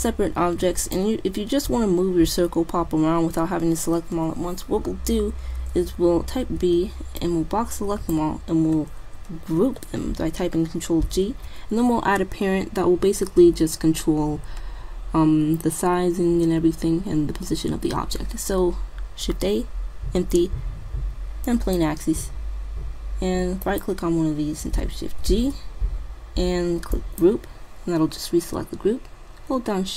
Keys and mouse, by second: 6.6 b, 9.6 ctrl+g, 11.1 shift+a, 23.7-25.3 right drag, 25.3 shift+g.